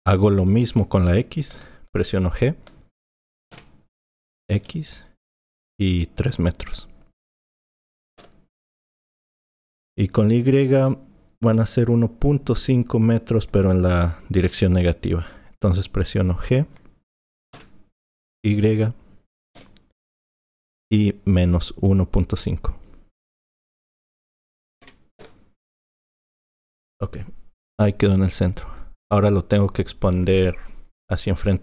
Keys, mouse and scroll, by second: 3.5 g, 17.6 g, 27.0 click.